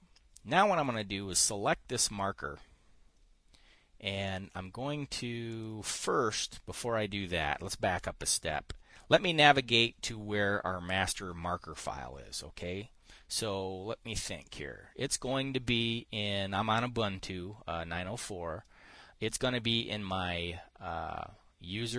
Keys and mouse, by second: 1.8 click, 6.0 click, 14.9 click.